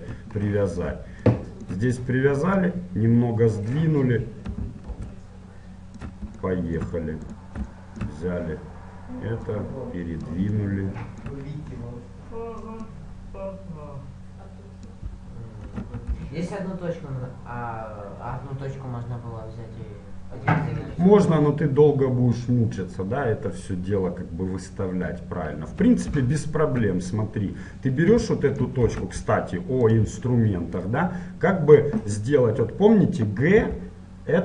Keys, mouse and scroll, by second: 0.5-1.4 scroll up 2, 2.7-4.6 drag, 5.1 ctrl+Tab, 6.1 middle click, 6.6 middle click, 7.5-9.1 right drag, 8.7 click, 9.2 middle click, 9.5-10.7 drag, 11.3-12.9 middle drag, 12.9-14.6 drag, 15.9 e, 26.1 ctrl+z, 27.7-30.3 middle drag, 29.0 ctrl+Tab, 30.9-32.6 right drag, 33.7 g.